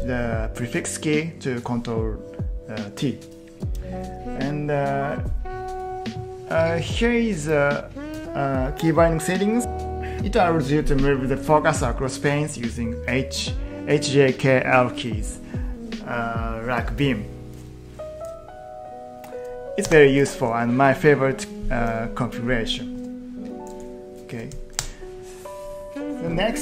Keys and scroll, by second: 19.9 Escape, 22.9 q, 24.3 q, 24.7 Return.